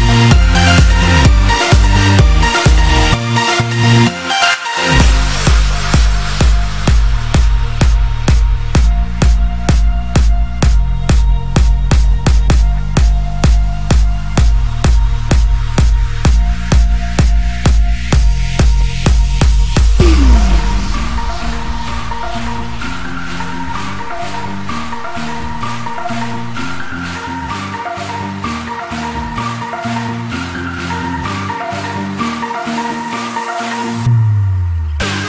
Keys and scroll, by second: 0.1 ctrl+i, 14.9 ctrl+alt+shift+e.